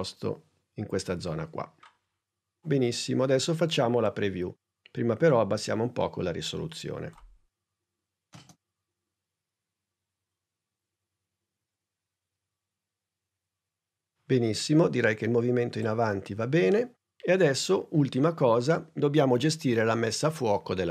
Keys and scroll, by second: 8.3 space.